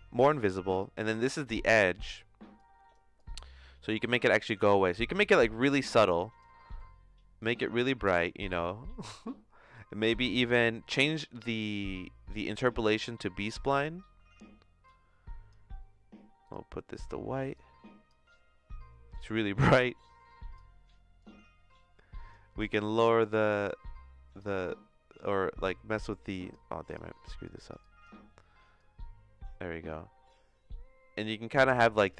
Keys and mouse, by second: 0.7 click, 1.9 click, 6.6 middle click, 7.4-8.5 drag, 9.7 click, 10.9-11.9 drag, 12.4-13.4 drag, 14.9 click, 19.2-20.5 drag, 21.2-22.3 drag, 25.2-26.5 drag, 26.8 click, 28.7-32.1 drag.